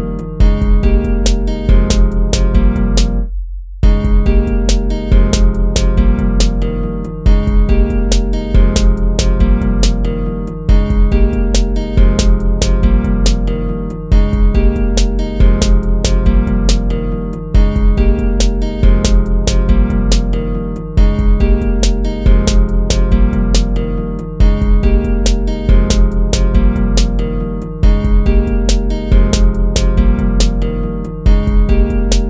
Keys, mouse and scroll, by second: 0.0 BackSpace, 0.6 BackSpace, 1.0 ctrl+-, 2.0 ctrl++, 2.4 ctrl++, 2.8 ctrl++, 6.7 ctrl+-, 7.2 ctrl++, 7.8 ctrl++, 12.3 ctrl+-, 23.9 ctrl+-, 24.1 ctrl++.